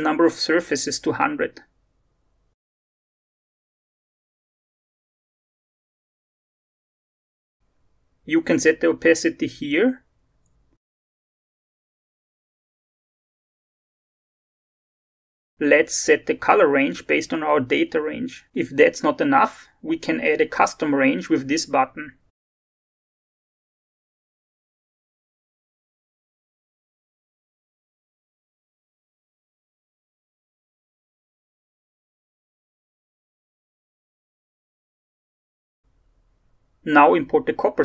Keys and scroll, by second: 0.8 0, 9.8 0, 10.1 ., 10.2 5, 10.3 Return, 24.7 0, 34.7 BackSpace, 34.8 1, 35.0 Return.